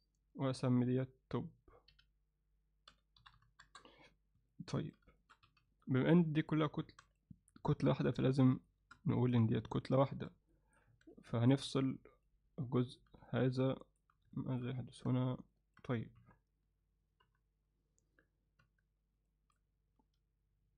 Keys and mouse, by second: 0.9 click, 1.9 F2, 4.5 alt+middle click, 5.2 alt+shift+middle click, 5.5 z, 5.9 middle click, 6.4 click, 6.9 Tab, 7.1 click, 7.9 alt+middle click, 8.6 shift+click, 9.1 middle click, 10.6 middle click, 10.9 Tab, 11.3 alt+middle click, 12.2 click, 12.6 alt+middle click, 13.3 alt+middle click, 14.4 ctrl+middle click, 15.1 Tab, 15.6 middle click, 16.2 KP_1, 17.3 KP_3, 18.6 Tab, 19.3 shift+middle click, 20.0 z.